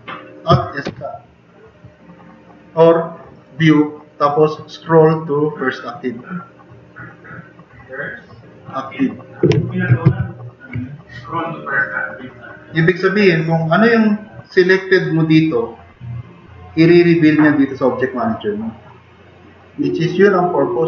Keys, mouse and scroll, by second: 0.9 alt+s, 10.1 super+=.